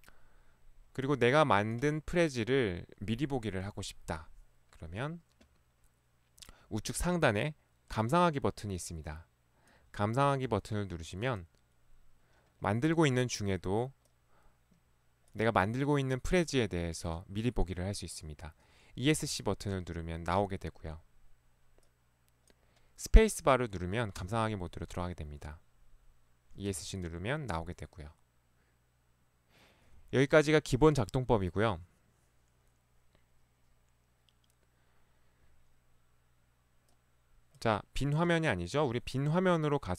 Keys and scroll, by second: 7.1 ctrl+1, 8.2 ctrl+1, 10.5 ctrl+Escape, 10.6 ctrl+1, 19.2 Escape, 24.3 space, 26.8 Escape.